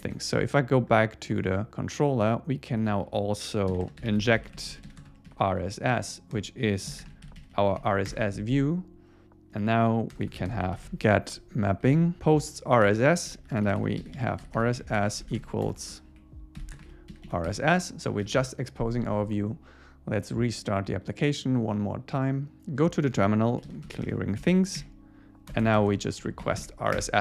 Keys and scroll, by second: 0.0 super+s, 8.1 Return, 10.2 Return, 10.5 alt+l, 10.8 super+Right, 11.3 Return, 11.9 Up, 12.2 Tab, 12.9 Return, 17.5 Escape, 18.1 super+s, 24.1 Return, 24.4 Up, 25.0 Up, 27.0 Return.